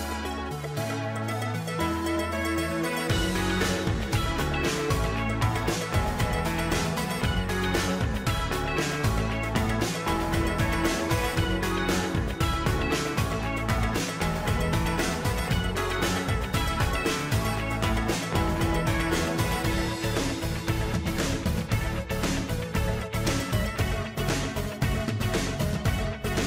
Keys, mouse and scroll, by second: 12.8 click, 14.1 click, 16.3-26.4 typing.